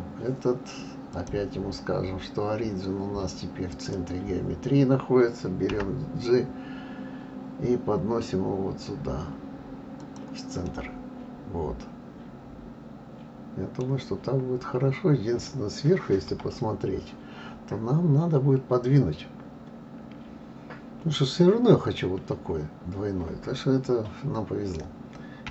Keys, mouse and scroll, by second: 1.1-4.1 drag, 10.7-13.7 middle drag, 14.2-14.8 scroll up 4, 16.2 KP_7.